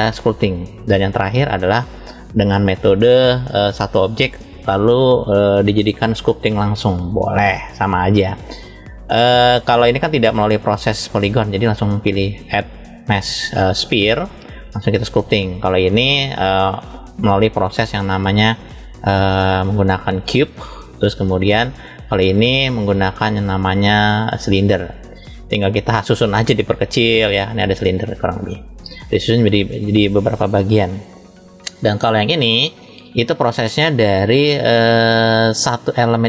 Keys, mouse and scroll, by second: 1.1 click, 3.1-4.3 middle drag, 12.2-14.3 drag, 15.2 click, 15.9 click, 19.1-21.4 drag, 22.0 click, 23.0-28.6 drag, 30.7-31.9 shift+middle drag, 32.4 click, 33.9-35.1 shift+middle drag, 35.6 scroll down 1.